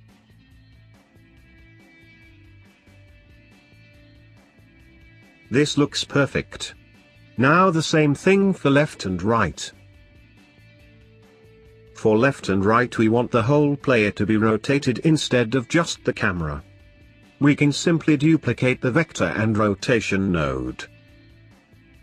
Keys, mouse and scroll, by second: 8.2 middle click, 9.0-10.2 drag, 10.2-11.7 scroll down 2, 11.7 click, 12.6 click, 15.9-17.1 middle drag, 17.1 click, 17.8 shift+click, 20.3 click, 21.2 click.